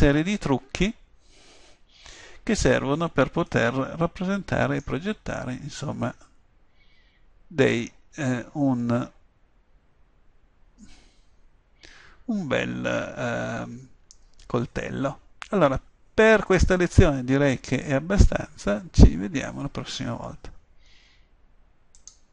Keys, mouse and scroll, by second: 3.8-13.9 middle drag.